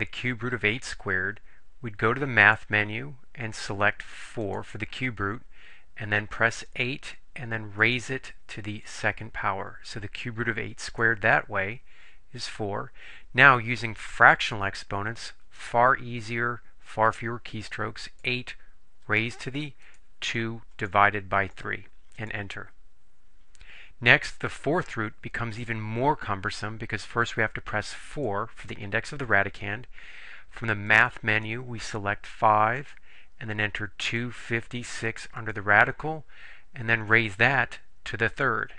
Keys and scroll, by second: 4.5 4, 6.8 8, 7.9 ^, 8.9 2, 11.0 Return, 18.2-21.6 typing, 22.3 Return, 28.3 4, 32.9 5, 34.1 2, 34.9 5, 35.5 6, 37.3 ^, 38.5 3.